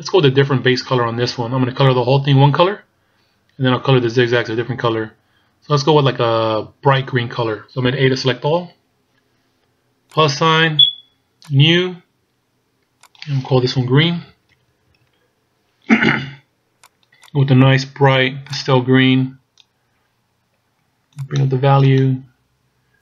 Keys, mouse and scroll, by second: 0.2-2.2 scroll up 2, 5.0-5.6 scroll down 1, 5.7-8.3 scroll up 1, 8.5 a, 10.2 click, 11.5 click, 13.1 click, 14.7 e, 17.4 click.